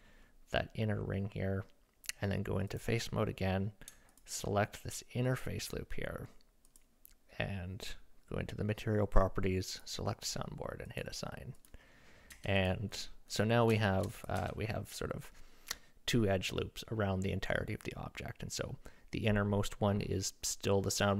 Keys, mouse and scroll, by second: 2.7 click, 4.1 alt+click, 4.4-6.7 middle drag, 6.7 click, 6.8 middle click, 9.7 click, 11.5 click, 12.3 Tab, 12.6 click, 13.8 shift+middle drag, 14.2 click, 14.4 Tab.